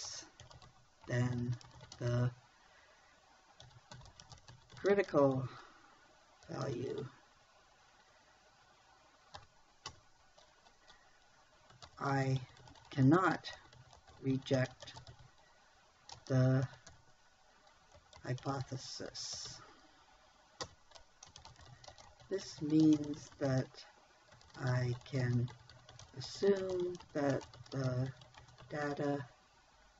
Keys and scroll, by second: 0.0-2.4 typing, 4.1-5.6 typing, 7.1 u, 7.2 e, 9.8 ,, 10.3 Return, 12.3-15.5 typing, 16.6 space, 17.1 h, 17.3 y, 18.4-20.0 typing, 21.1 Return, 21.9-29.4 typing.